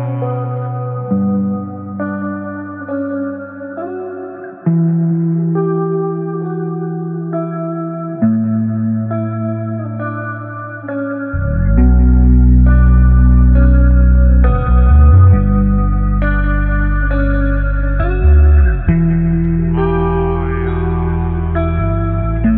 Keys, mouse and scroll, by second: 3.5 alt+v, 3.8 ctrl+alt+t, 5.7-7.2 alt+drag.